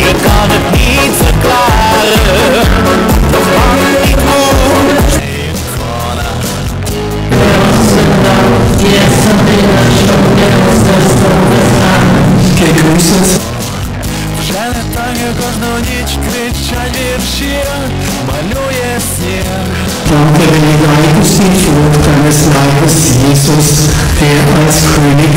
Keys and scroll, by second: 5.4 Page_Down, 13.8 Page_Down.